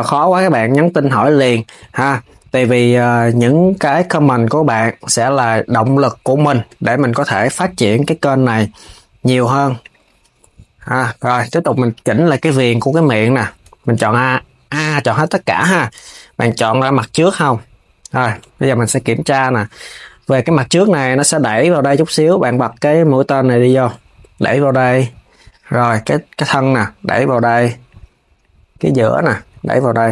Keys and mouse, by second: 2.2 click, 3.9 shift+click, 5.4 click, 6.1 shift+click, 6.6 KP_3, 7.3 g, 10.7 click, 11.6 Tab, 14.5 a, 14.7 KP_1, 16.8 click, 18.9 KP_3, 19.6 KP_1, 22.4-23.6 drag, 25.1 click, 25.8 click, 27.5 click, 28.1 click, 29.7 click.